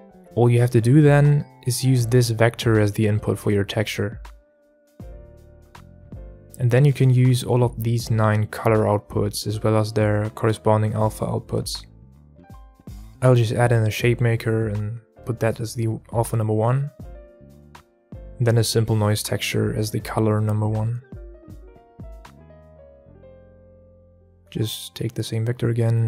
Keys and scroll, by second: 14.0 shift+a, 14.2 shift+a, 22.7 shift+a.